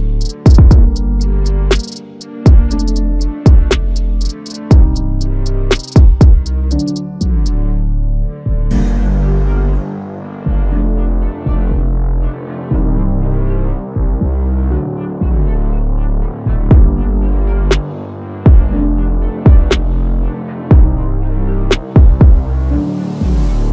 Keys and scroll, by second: 1.5 ctrl+v, 1.7 ctrl+a, 6.6 ctrl+t, 9.3 ctrl+t, 13.8 alt+Tab, 14.5 ctrl+c, 14.6 alt+Tab, 15.5 ctrl+a, 15.5 ctrl+v, 17.7 alt+Tab, 18.1 ctrl+c, 18.1 alt+Tab, 18.3 ctrl+v, 20.1 alt+Tab, 20.7 ctrl+c, 20.8 alt+Tab, 20.9 ctrl+v, 22.4 ctrl+t, 22.9 ctrl+t.